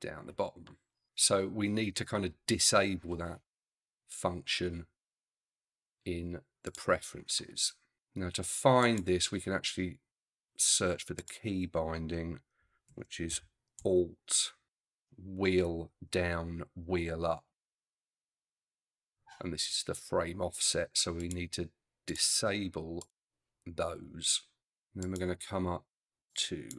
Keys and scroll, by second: 12.9 shift+a, 13.3 shift+l, 13.8 t.